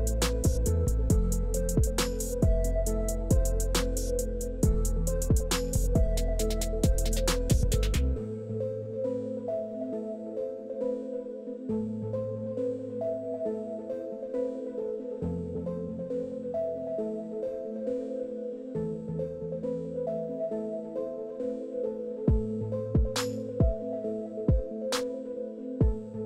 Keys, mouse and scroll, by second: 0.2 shift+click, 1.3-4.9 shift+drag, 5.4-5.7 scroll up 2, 6.8 shift+middle click, 7.6-8.7 shift+drag, 8.8 scroll up 1, 9.2 shift+middle click, 10.0 scroll up 1, 10.3 shift+middle click, 11.8-15.1 shift+drag, 15.2 shift+middle click, 15.4 shift+middle click, 16.5-17.2 shift+middle drag, 17.5-18.7 shift+middle drag, 19.2 scroll up 1, 20.0 shift+click, 20.8 shift+middle click, 21.7-22.2 shift+middle drag, 22.5-23.8 scroll down 4, 22.6 shift+middle click, 23.8 shift+middle click, 24.0 shift+middle click, 24.3 shift+middle click, 24.6-24.9 shift+middle drag, 25.7-26.2 shift+drag.